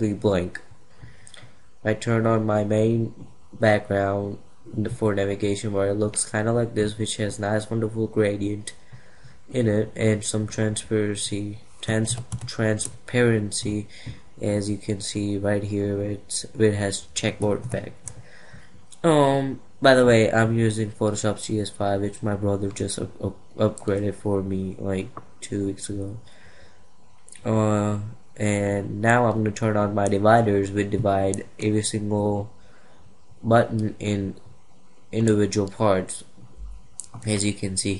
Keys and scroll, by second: 11.6 ctrl+=, 17.1 ctrl+0.